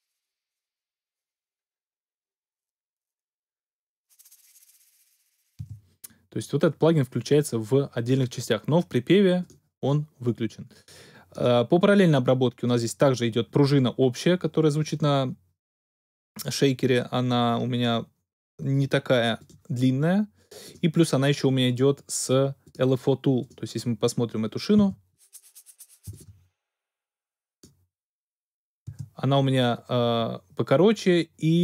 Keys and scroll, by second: 5.6 space, 24.7 space, 28.8 space.